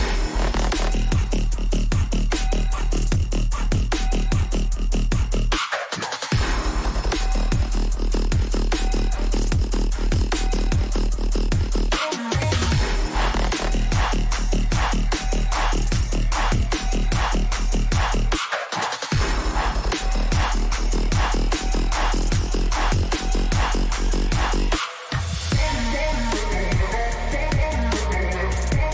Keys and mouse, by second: 3.2 click, 5.4 click, 8.7 click, 12.7 right click, 14.4 click.